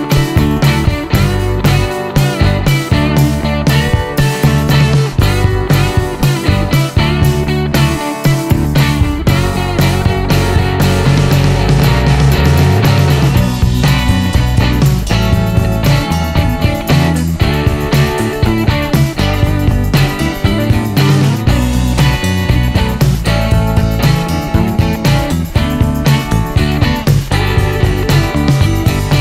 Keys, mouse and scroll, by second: 1.2 click, 2.6 click, 3.1 middle click, 4.7 click, 5.8 click, 6.5-7.5 scroll down 3, 7.5-9.4 middle drag, 10.5-11.5 middle drag, 12.6 right click, 15.4 click, 16.2-16.6 scroll down 1, 18.1 click, 20.0 click, 20.8 click, 22.5 ctrl+s, 26.0 click, 27.7 click.